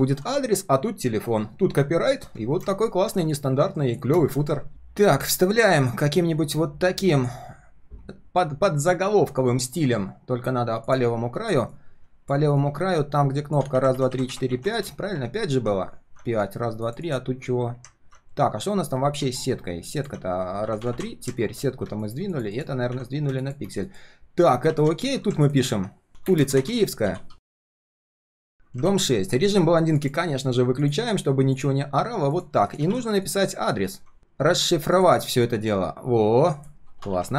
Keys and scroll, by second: 4.7 ctrl+v, 18.3 ctrl+shift+3, 18.6 ctrl+shift+4, 18.9 ctrl+shift+3, 28.8 ctrl+a, 34.2 ctrl+c, 34.5 ctrl+v.